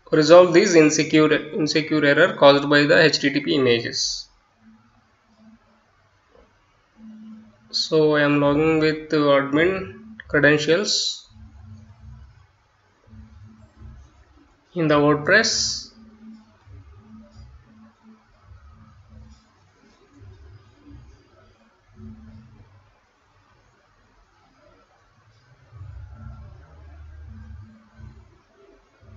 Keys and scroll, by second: 1.1-4.4 typing, 6.0-8.4 typing, 10.0 Return, 18.4-21.4 typing.